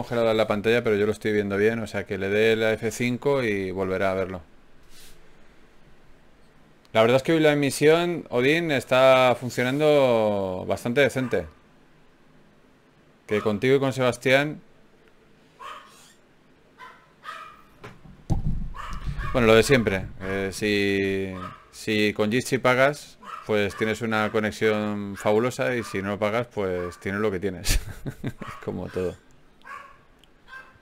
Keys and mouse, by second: 1.8 g, 3.0-4.5 right drag, 3.2 g, 5.0-6.2 right drag, 5.2 g, 7.6 g, 9.2 g, 12.8-15.1 middle drag, 16.5 click, 16.9 g, 20.3 o, 20.5 o, 22.5 g, 23.3 click, 23.7 g, 25.1 g, 27.2 alt+m, 29.0 g, 30.0 g.